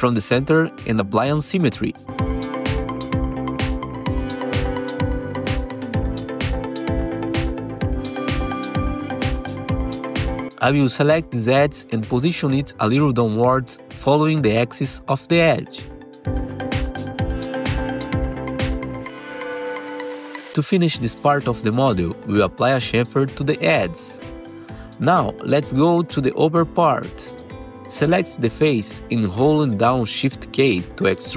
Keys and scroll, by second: 0.0 alt+q, 0.9 4, 2.6 Delete, 11.2 2, 15.5 ctrl+alt+e, 17.4 ctrl+alt+e, 18.4 2, 19.3 F4, 20.7 2, 23.5 ctrl+shift+c, 25.3 2, 25.5 F4, 27.2 F4, 27.7 4, 28.2 F3, 28.8-29.7 typing.